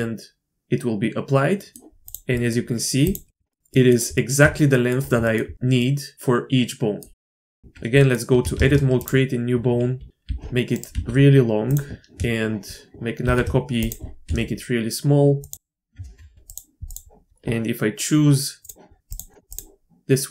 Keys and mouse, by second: 0.0-1.7 drag, 2.3 click, 3.4 shift+click, 3.5 click, 3.7 drag, 4.1 shift+drag, 4.7 drag, 5.2 shift+drag, 5.8-7.0 drag, 7.2 drag, 7.6 click, 7.6 Tab, 8.0 click, 8.5 shift+a, 9.0 click, 9.9 g, 10.2 r, 10.9 s, 13.2 shift+d, 14.2 s, 15.5 Tab, 15.9 Tab, 16.4 click.